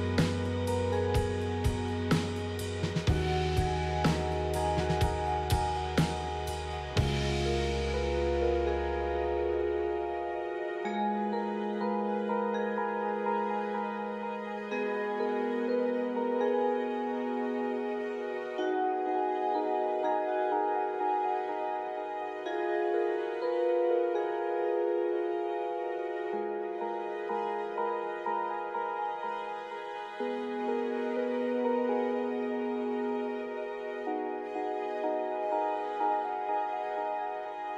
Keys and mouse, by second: 1.5 s, 3.6-5.2 middle drag, 6.3 s, 7.8 g, 9.2 middle click, 11.7 middle click, 13.2 KP_3, 13.7 Tab, 17.1 click, 17.7 Tab, 17.9 click, 18.7 Tab, 18.8 click, 19.1 Tab, 20.0 alt+z, 20.8-22.9 drag, 24.6 shift+d, 29.2 p, 30.4 Tab, 31.0 click, 31.3 Tab, 31.7 Tab, 32.5 middle click, 32.9 alt+z, 34.3 shift+click, 35.6 ctrl+j, 36.2 Tab.